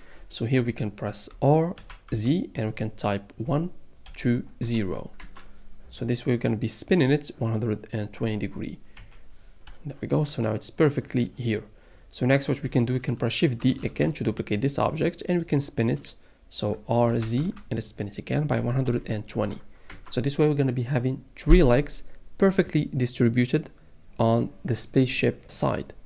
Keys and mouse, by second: 1.7 r, 2.1 z, 3.4 KP_1, 4.0 KP_2, 4.6 KP_0, 5.2 KP_Enter, 9.0 KP_7, 13.8 shift+d, 17.4 r, 17.4 z, 18.5 KP_1, 18.8 KP_2, 19.3 KP_0, 19.9 KP_Enter.